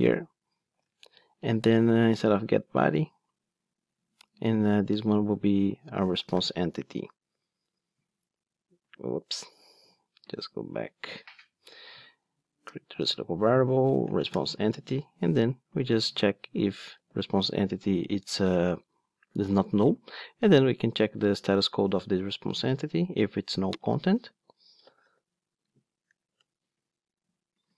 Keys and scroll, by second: 0.8 super+z, 3.2 super+x, 6.4 alt+Return, 9.0 super+z, 12.2 alt+Return, 14.4 Return, 16.0 super+c, 23.9 super+v, 26.4 Return.